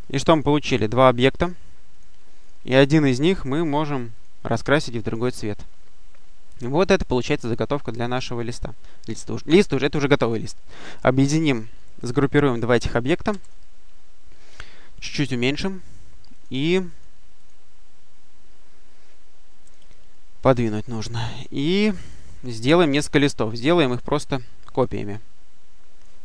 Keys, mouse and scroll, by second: 0.2 click, 0.9 click, 1.8 click, 4.0 click, 4.9 click, 8.2-9.9 drag, 13.1 ctrl+g, 15.2 click, 16.2 click, 16.8 click, 17.7-18.1 scroll down 2, 19.5 click, 20.4 click, 21.6 click, 22.9 click, 23.7 click.